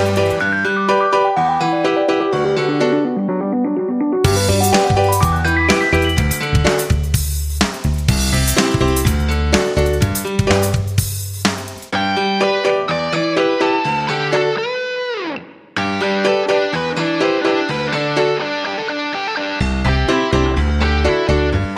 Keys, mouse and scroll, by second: 3.6 F9, 4.4 shift+click, 6.8-8.7 drag, 11.7-19.6 drag, 20.4-21.7 shift+drag.